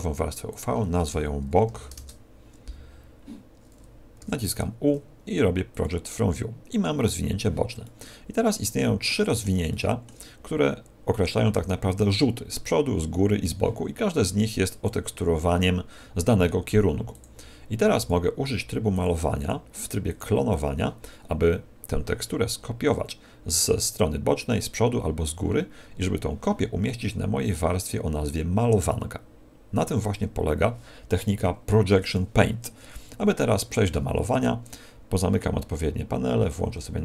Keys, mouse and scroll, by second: 9.0 middle click, 9.6 middle click, 14.7 click, 17.1 click, 18.9 click, 27.4 click, 33.9 n, 36.9 click.